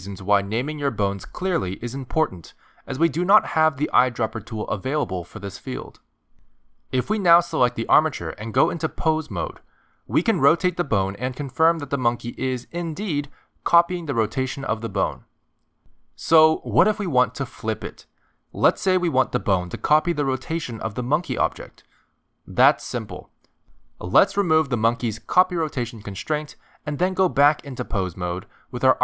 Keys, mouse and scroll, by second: 3.0 click, 7.7 click, 9.4 ctrl+Tab, 10.5 r, 13.0 r, 25.0 ctrl+Tab, 25.5 click, 27.2 click, 28.4 click.